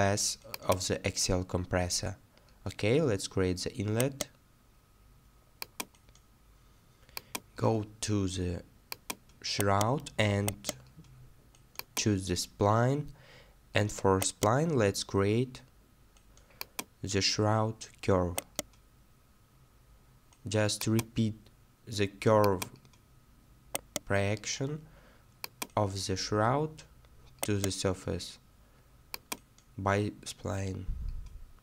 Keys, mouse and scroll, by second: 1.0 right click, 1.1-1.5 scroll down 1, 4.0 right click, 7.6 right click, 7.6 scroll down 1, 9.6 right click, 12.2-12.5 scroll down 1, 14.2-14.8 scroll down 1, 17.2-17.7 scroll down 1, 18.4-18.7 scroll down 1, 22.9 scroll down 1, 23.7-24.0 scroll down 1, 27.4 right click.